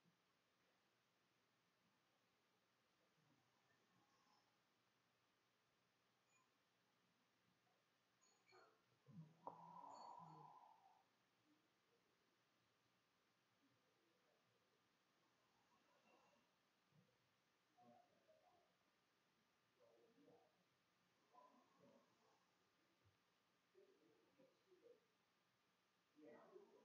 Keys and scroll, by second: 0.0-3.5 typing, 7.6 f, 11.3 c, 11.9 f, 12.2 s, 13.7-15.3 typing, 17.8 Tab, 18.4-26.8 typing.